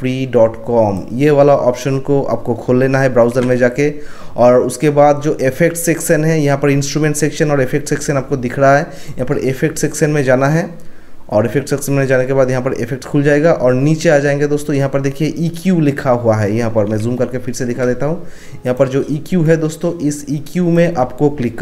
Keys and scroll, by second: 3.2 ctrl+1, 17.2 ctrl+1.